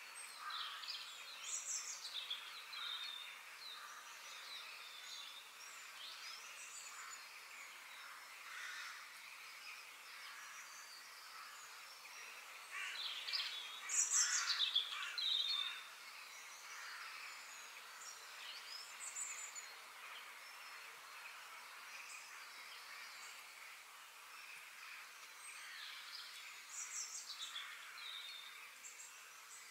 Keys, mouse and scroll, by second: 4.7-6.6 middle drag, 7.0-8.9 middle drag, 10.6 middle click, 11.5-12.5 scroll down 1, 12.5-13.4 scroll down 1, 20.0 g, 23.0-26.1 middle drag, 28.0-28.5 scroll down 2, 28.5 middle click, 29.4 click.